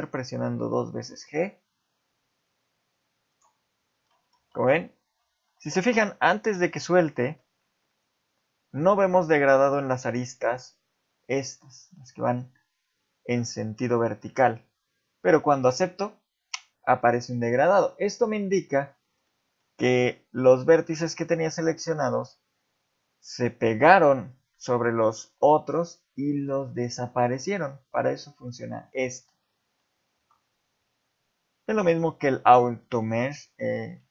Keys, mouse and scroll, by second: 4.1 middle click, 4.4 z, 4.8-5.4 scroll up 1, 5.4 ctrl+z, 6.4 g, 17.4 middle click, 18.0 shift+middle click, 18.4 scroll up 2, 19.3 shift+middle click, 29.8 ctrl+z, 30.0 ctrl+z, 30.4-31.8 scroll down 4, 31.8 click, 32.4 shift+click, 32.8 shift+middle click, 33.1 scroll up 1.